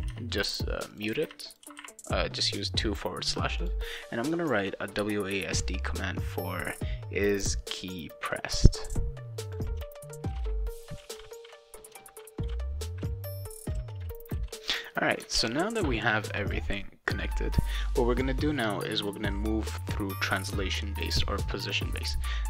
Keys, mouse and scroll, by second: 0.9 click, 1.1 /, 1.2 /, 1.5 click, 1.7 /, 3.6 click, 8.1-9.5 drag, 9.6 ctrl+c, 9.7 click, 10.3 ctrl+Return, 10.3 ctrl+v, 10.9-12.4 typing, 11.1 shift+click, 11.4 click, 12.8 click, 13.3 click, 13.5 click, 13.9 shift+click, 14.2 click, 14.6 click, 15.3 ctrl+s, 19.1-21.2 drag.